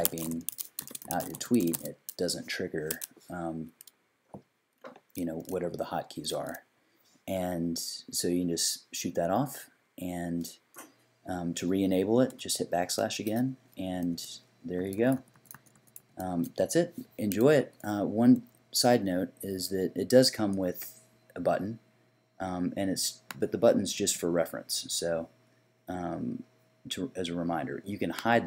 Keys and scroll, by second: 0.0-2.2 typing, 13.0 \, 14.0-16.3 typing.